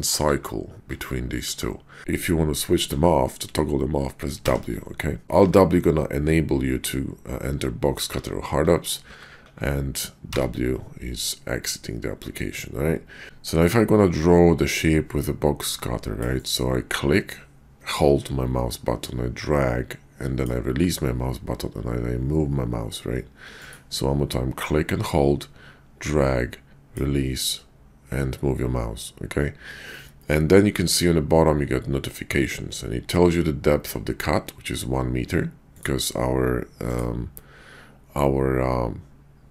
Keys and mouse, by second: 0.3 alt+w, 0.9 alt+w, 1.5 alt+w, 2.8 alt+w, 4.4 w, 5.3 alt+w, 8.1 alt+w, 8.6 alt+w, 9.1 alt+w, 9.4 alt+w, 10.2 w, 13.2 ctrl+z, 15.4 click, 17.2-23.7 drag, 24.6-39.5 drag.